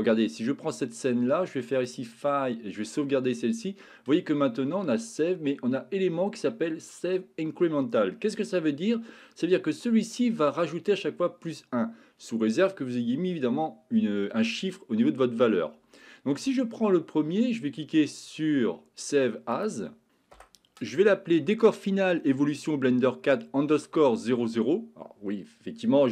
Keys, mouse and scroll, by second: 2.0-19.8 drag.